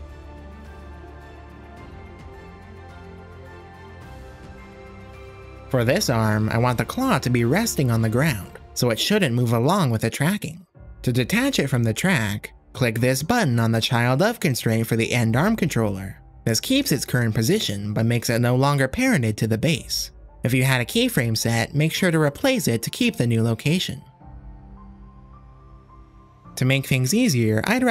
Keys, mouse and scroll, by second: 0.0-3.6 typing, 0.1 click, 1.1 middle click, 4.2-4.6 drag, 5.2 g, 7.3-9.4 drag, 10.0 click, 10.9 click, 11.4 click, 12.8 click, 15.2 click, 18.4 click, 20.0 click, 21.8 click, 23.6-26.1 drag, 25.9-27.9 typing, 26.2 click, 27.5 click.